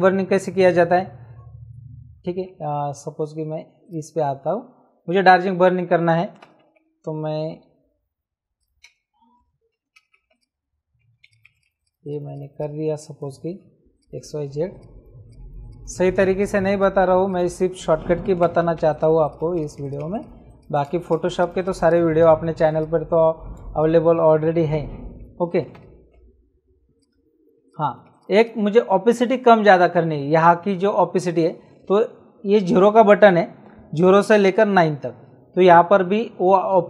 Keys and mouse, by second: 3.8 click, 8.5 click, 8.8 b, 10.3 click, 13.7 space, 13.9 click, 14.7 click, 15.9 space, 16.3 click, 17.0 space, 17.3 click, 17.3 click, 18.9 click, 20.8 click, 20.8 space, 23.5 space, 23.7 click, 25.7 KP_2, 26.9 click.